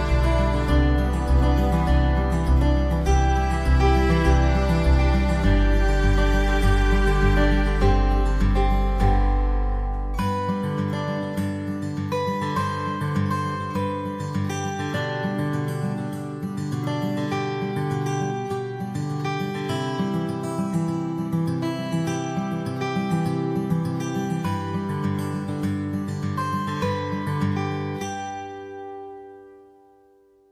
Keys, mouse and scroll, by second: 4.7-6.7 drag, 7.5-10.0 drag, 11.1-16.0 drag, 17.3-23.7 drag, 24.2-26.1 drag, 29.5 click.